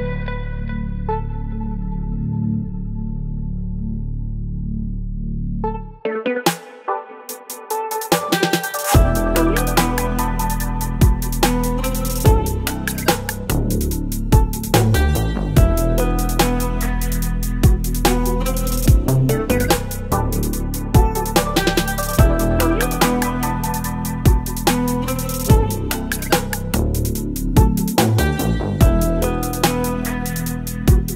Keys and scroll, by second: 12.0 space, 20.5 Return.